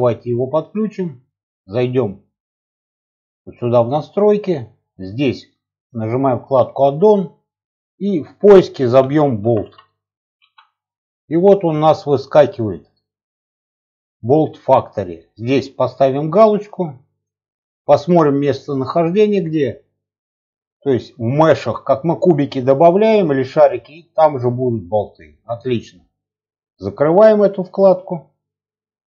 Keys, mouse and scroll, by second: 0.7-3.9 drag.